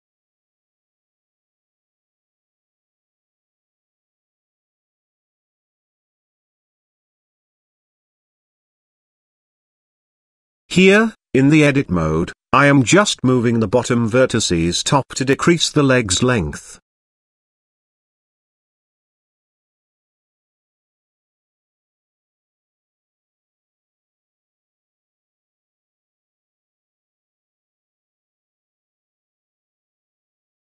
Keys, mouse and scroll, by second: 0.2 g, 1.8 KP_7, 2.7 g, 4.7 KP_Decimal, 5.5 middle drag, 5.8 z, 6.9 scroll up 1, 6.9 middle drag, 7.3-7.6 shift+middle drag, 7.7 middle click, 9.8 Tab, 10.9 click, 11.3 z, 12.2 click, 13.3 g, 15.7 Tab, 16.3 g, 18.8 z, 19.7 middle drag, 20.4-20.8 shift+middle drag, 21.0 middle click, 21.8 s, 23.1-23.4 shift+middle drag, 24.3 g, 26.8 middle click, 27.2 shift+middle click, 28.1 middle click, 29.6 shift+middle click, 30.0 middle click, 30.6 shift+middle click.